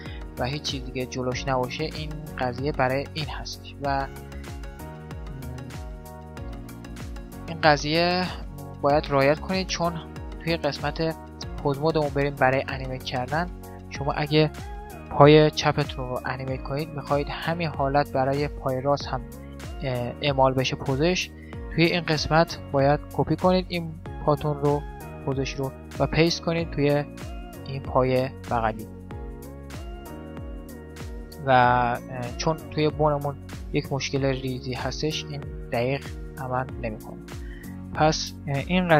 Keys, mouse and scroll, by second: 4.4-8.4 middle drag, 10.2 Tab, 12.2 right click, 13.2 click, 14.0-16.0 middle drag, 15.2 g, 22.8-24.6 drag, 25.8-27.6 drag, 27.0 right click, 28.7-31.2 middle drag, 28.7 right click, 29.8 g, 31.8 middle click, 35.4 middle click, 36.4-38.2 middle drag, 37.8 a, 37.9 a.